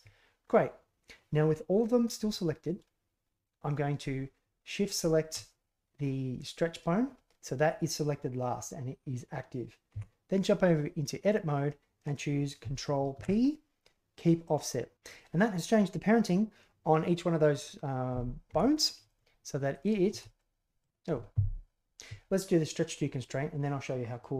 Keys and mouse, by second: 4.9 shift+click, 9.9 Tab, 13.1 ctrl+p, 18.4 Tab, 19.7 click, 20.0 g.